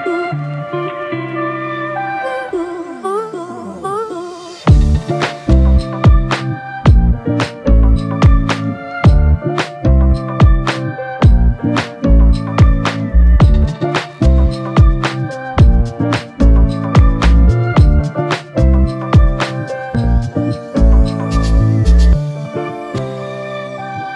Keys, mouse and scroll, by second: 0.3 shift+click, 2.2 shift+click, 2.8 alt+click, 5.4 f, 7.7 double click, 9.2 shift+click, 13.7 shift+click, 16.9 double click, 19.9 alt+click, 23.3 f.